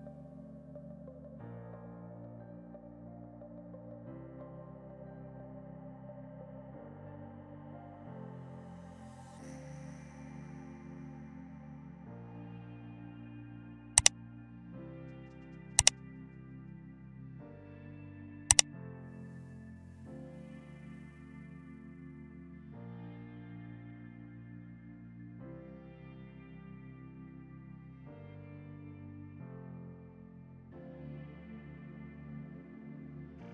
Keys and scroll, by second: 1.1 ctrl+g.